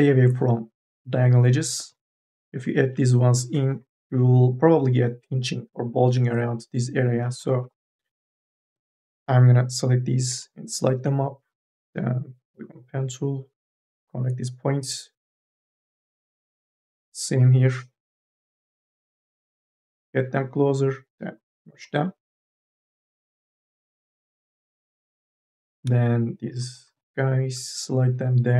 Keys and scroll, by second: 1.6-4.1 typing, 7.4 ctrl+z, 8.4 2, 8.6 e, 10.2 m, 10.6 o, 13.6 1, 17.1 2, 17.6 e, 18.1 m, 18.5 o, 19.5 1, 25.6-27.9 typing.